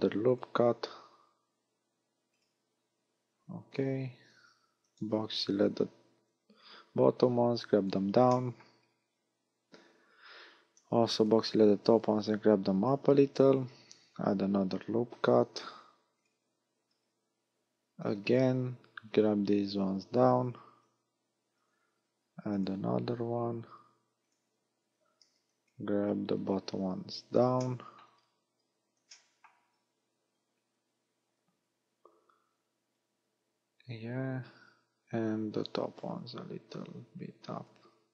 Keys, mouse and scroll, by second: 2.4 click, 3.3 a, 5.0 b, 6.3 click, 8.4 shift+middle click, 8.8-9.9 scroll down 3, 9.9 a, 10.9 b, 12.2 click, 13.3 a, 14.3 ctrl+r, 16.3 click, 16.7 a, 16.9-17.9 scroll up 1, 17.9 scroll up 2, 18.1 b, 19.1 click, 20.8 a, 22.1 ctrl+r, 24.3 click, 24.9 a, 25.3 b, 26.4 click, 27.7 shift+middle click, 28.2 scroll down 2, 29.1 shift+middle click, 31.9-33.8 scroll down 2, 33.8-34.4 scroll up 3, 34.9 a, 35.7 b, 36.7 click.